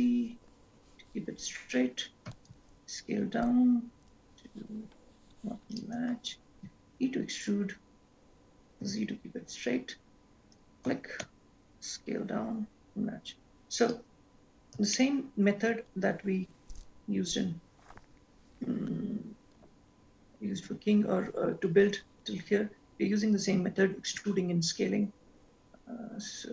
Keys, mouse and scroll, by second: 2.5 s, 6.8 e, 11.1 s, 15.1 shift+middle click, 21.2-23.4 scroll down 6, 23.4-24.0 scroll up 7, 24.5 e.